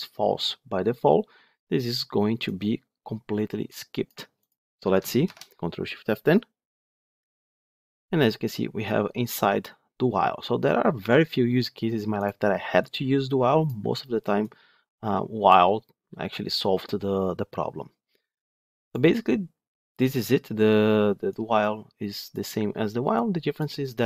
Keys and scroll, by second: 5.2 ctrl+shift+F10, 5.9 ctrl+shift+F10.